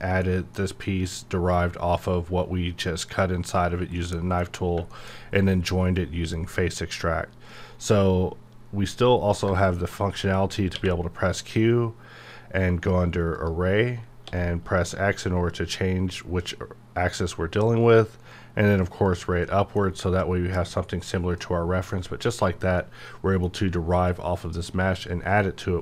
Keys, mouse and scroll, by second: 0.9-2.0 scroll up 1, 4.0 middle click, 4.4 scroll down 1, 4.9 shift+middle click, 7.4-9.2 middle drag, 9.2 scroll down 1, 9.5 shift+middle click, 10.7 q, 13.5 click, 14.2 x, 16.1-16.7 scroll up 1, 19.0 scroll up 1, 19.1 click, 19.4 middle click, 20.1-20.7 scroll up 1, 21.3-25.8 middle drag.